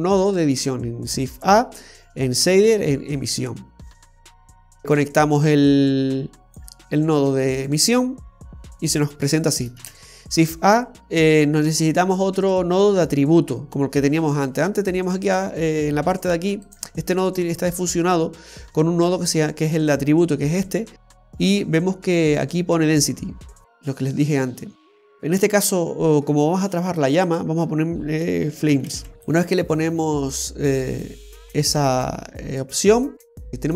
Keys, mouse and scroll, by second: 0.1-1.7 scroll up 7, 1.7 middle click, 1.7-2.9 scroll up 2, 3.1 click, 5.9 click, 10.0 shift+a, 17.9-18.6 scroll down 4, 18.6 middle click, 21.2 middle click, 25.9 middle click, 27.4 click, 29.7 click, 32.0 click, 33.5 click.